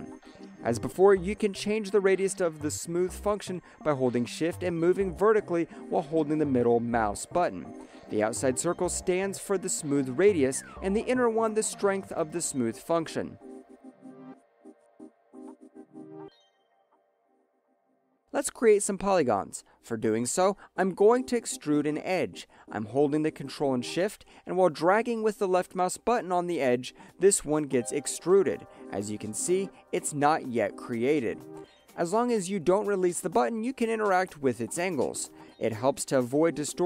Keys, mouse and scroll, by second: 1.6 ctrl+shift+middle click, 5.4 alt+middle click, 6.0 shift+middle click, 7.1 shift+middle click, 8.3 ctrl+shift+middle click, 10.3 shift+middle click, 11.9 ctrl+shift+middle click, 13.9 ctrl+middle click, 14.9 ctrl+shift+middle click, 16.8 click, 18.0 alt+middle click, 21.4 ctrl+shift+click, 23.5 ctrl+shift+click, 26.2 ctrl+shift+click, 29.1 ctrl+shift+click, 32.0 ctrl+shift+click, 36.2 ctrl+shift+click.